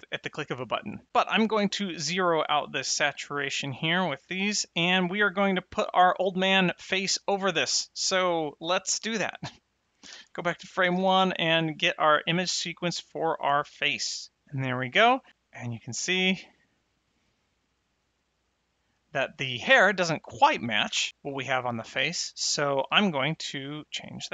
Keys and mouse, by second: 1.1 click, 4.1 click, 10.1 shift+Left, 10.9 shift+a, 11.4 click, 13.2 click, 15.7 space, 20.8 space, 23.8 click.